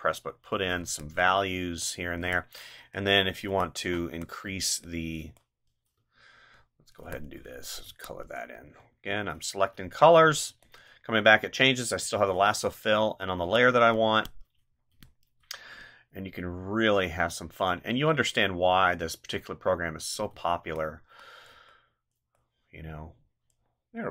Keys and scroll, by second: 0.8 space, 2.2 space, 13.4 space, 14.9 space, 20.3 space.